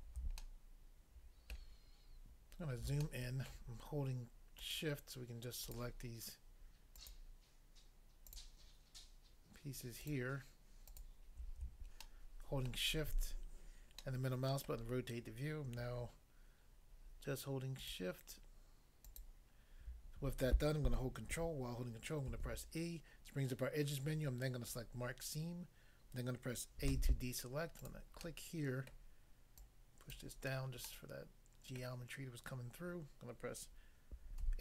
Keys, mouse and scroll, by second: 0.5 shift+middle click, 1.5 shift+middle click, 2.5 scroll up 1, 3.1 shift+middle click, 4.6 shift+click, 4.7 shift+click, 5.7 shift+click, 5.8 shift+click, 7.0 shift+click, 7.1 shift+click, 10.0 shift+click, 10.1 shift+click, 10.9 shift+click, 12.1 shift+middle click, 17.9 shift+click, 22.3 ctrl+e, 24.7 click, 26.9 a, 27.8 click, 28.3 middle click, 28.9 middle click, 29.6 click, 30.2 click, 30.9 middle click, 31.8 middle click, 34.4 a.